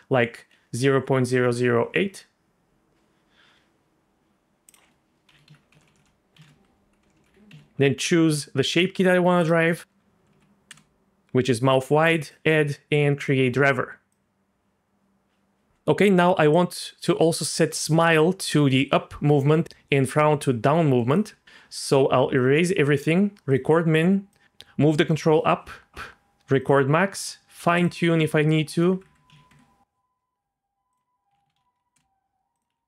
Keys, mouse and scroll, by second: 0.9 KP_0, 4.7-8.3 drag, 5.8 BackSpace, 7.1 BackSpace, 9.4-10.7 drag, 10.3 Down, 12.2 click, 13.2 click, 14.1-15.7 drag, 16.5-21.1 drag, 22.4 click, 23.5 click, 24.3-25.4 drag, 26.6 click, 27.1 click, 27.7-29.5 drag, 29.0 KP_0, 30.9-31.9 drag, 32.5-32.8 drag.